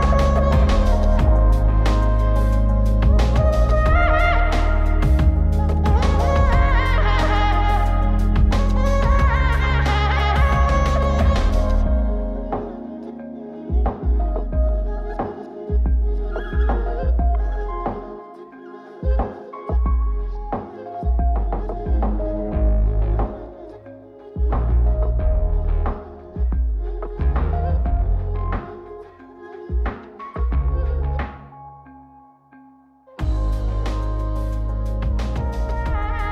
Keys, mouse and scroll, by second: 9.8 Tab, 12.2 click, 13.9-15.6 drag, 17.1 click, 18.9 click, 19.5 click, 20.6-21.5 middle drag, 22.0 KP_0, 23.6 click, 24.1 g, 28.0-30.6 drag, 32.4 ctrl+b, 36.2 scroll up 3.